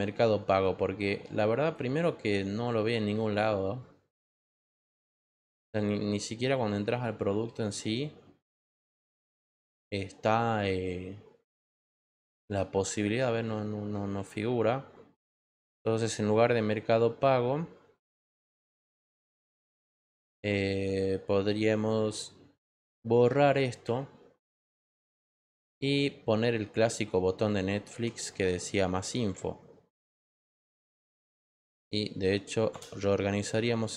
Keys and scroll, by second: 27.8 ctrl+t.